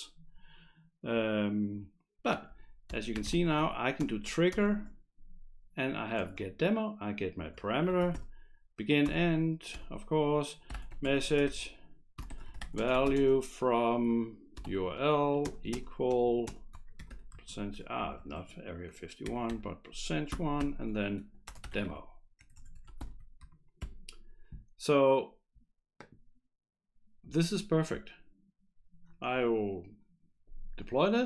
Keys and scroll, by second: 2.8-4.1 typing, 4.5 ctrl+space, 6.3 Return, 7.4 Return, 7.6-8.6 typing, 9.1 Return, 9.7 Return, 10.5-18.0 typing, 19.0-23.8 typing, 29.4 F5.